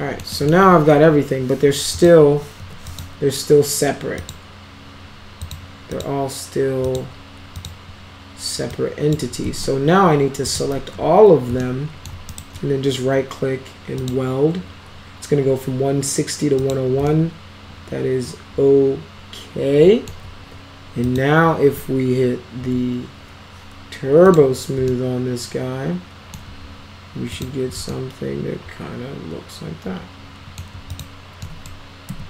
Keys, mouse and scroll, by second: 0.3 alt+middle click, 2.0 click, 2.6 2, 2.9 click, 4.2 click, 5.4 click, 6.0 click, 6.8 click, 7.6 click, 8.7 click, 9.4 ctrl+z, 10.5 click, 10.7 ctrl+a, 11.6-12.1 alt+middle drag, 12.3 right click, 12.8-13.2 right drag, 14.0 click, 16.6 click, 17.1-20.1 alt+middle drag, 21.1 click, 22.6 t, 22.9-23.4 scroll down 4, 24.3 click, 24.9-26.3 alt+middle drag, 27.3 click, 27.9-30.6 alt+middle drag, 30.9 click, 31.5 middle click, 32.1 F3.